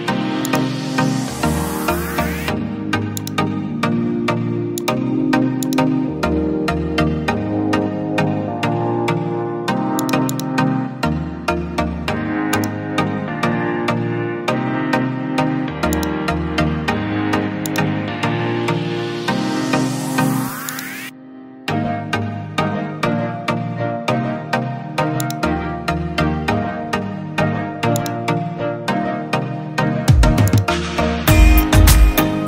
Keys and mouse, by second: 4.9-13.3 drag, 14.4-18.0 right drag, 25.1 right click, 31.0-32.4 drag.